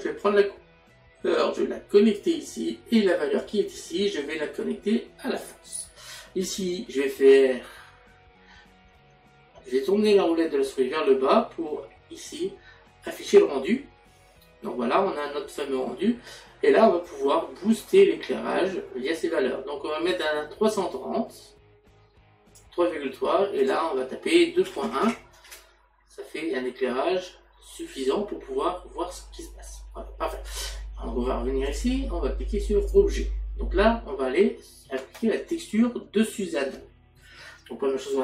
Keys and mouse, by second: 0.2 click, 3.4 click, 17.1 click, 23.6 click, 31.6 click, 32.8 click.